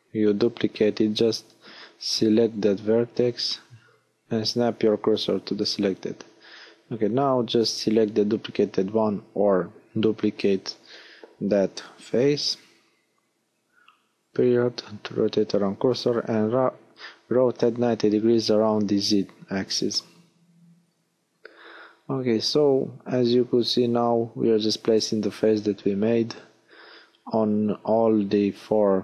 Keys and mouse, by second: 0.1 shift+s, 4.4-5.7 right drag, 5.7 l, 7.4 g, 8.2 click, 10.4 ., 13.0-14.0 middle drag, 15.0 r.